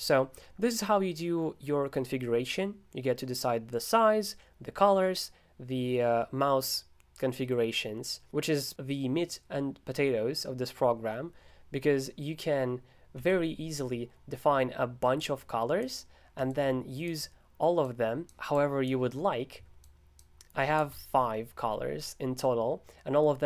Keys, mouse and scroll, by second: 5.1-6.9 scroll down 3, 13.2 super+g, 15.2-23.4 drag.